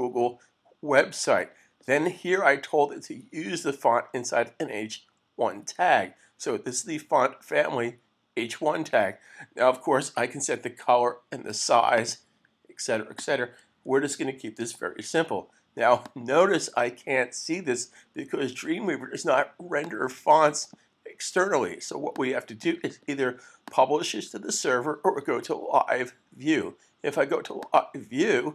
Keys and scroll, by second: 14.0 super+s.